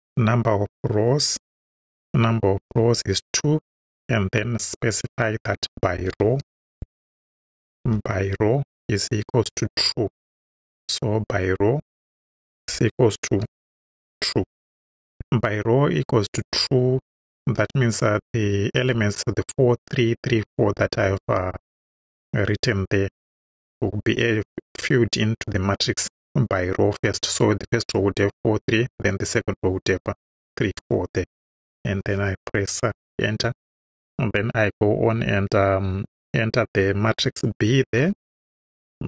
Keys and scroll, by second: 0.0-0.4 typing, 1.8 =, 2.7 2, 3.9 ,, 5.9-7.9 typing, 12.3 shift+t, 12.6 shift+r, 13.5 shift+u, 13.9 shift+e, 30.8 Right, 32.0 Return, 38.0 b.